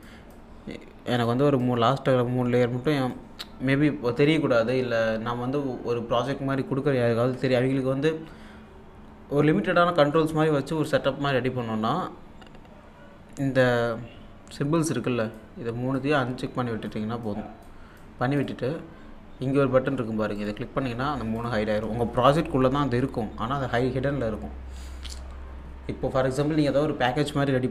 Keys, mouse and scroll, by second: 0.0-4.0 drag, 15.3-18.4 drag, 20.4 click.